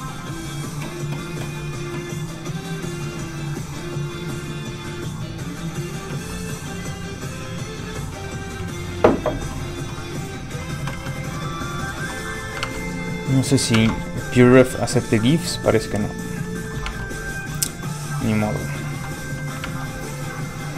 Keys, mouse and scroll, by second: 2.4 click, 10.9 alt+Tab, 12.4 Tab, 12.5 click, 14.7-15.1 alt+scroll down 2, 15.2 click, 15.7 scroll up 1, 16.4 middle click, 16.9 alt+Tab, 18.8 alt+click.